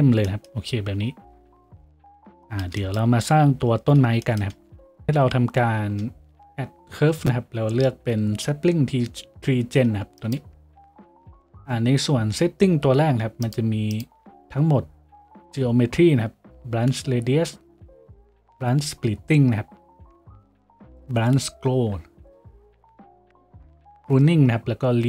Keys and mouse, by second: 0.7 a, 2.0 z, 5.8 shift+a.